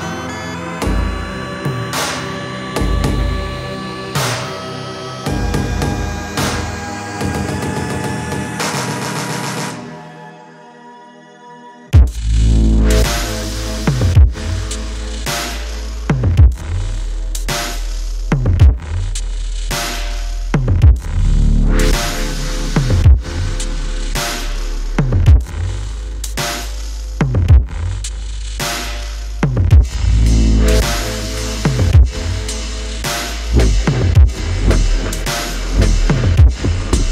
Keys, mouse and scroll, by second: 3.0 ctrl+click, 28.8 ctrl+t, 30.8 alt+shift+click.